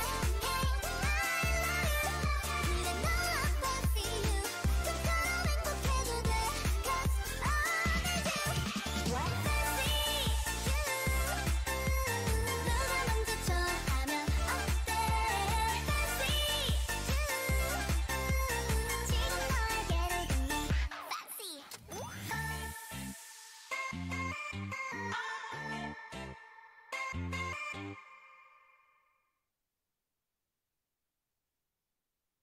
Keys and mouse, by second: 6.2-8.7 right drag, 7.3-12.5 drag, 12.5 ctrl+z, 13.6-15.6 drag, 19.1-24.8 drag, 24.8 Tab, 25.4 a, 25.8 a, 26.0 s, 27.7 s, 29.2 o, 30.3 s.